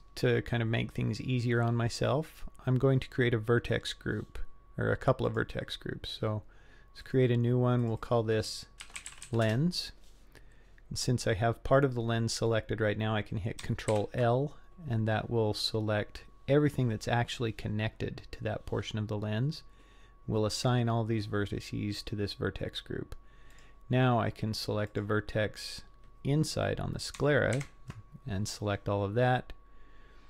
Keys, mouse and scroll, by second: 5.3 click, 7.0 click, 7.8 click, 8.0-10.0 drag, 13.9 ctrl+l, 20.6 click, 24.9 click, 27.6 ctrl+l.